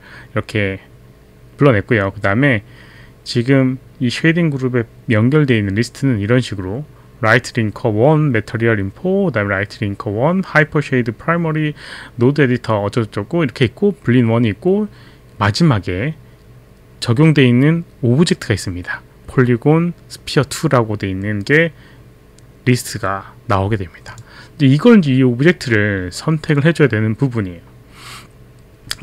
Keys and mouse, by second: 24.1 click.